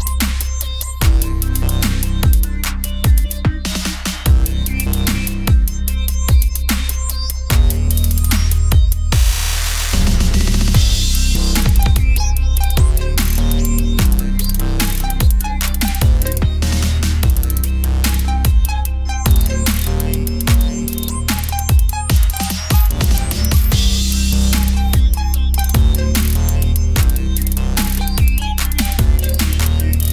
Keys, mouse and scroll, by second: 0.0-1.3 drag, 1.3 Tab, 1.9 Tab, 2.2 x, 3.2 middle click, 3.8 click, 4.0 x, 4.8 middle click, 4.9 Tab, 5.2 middle click, 5.7 click, 6.8 click, 7.4 middle click, 7.6 click, 8.4 KP_7, 10.5 KP_1, 11.2 middle click, 11.9 Tab, 13.0-14.4 drag, 14.6 s, 16.4 click, 17.0 s, 18.6 Tab, 19.1 click, 19.7 middle click, 20.2 shift+d, 21.6 shift+d, 22.8 shift+d, 25.2 click, 26.4 click, 27.2 BackSpace, 28.0 n, 28.8 click, 29.7 n.